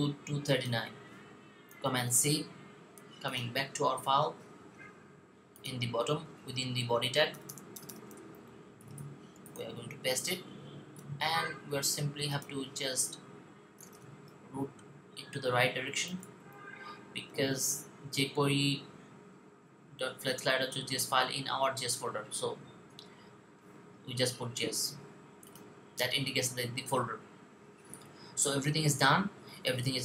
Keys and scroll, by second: 1.7 super+c, 9.2 v, 15.7-16.6 typing.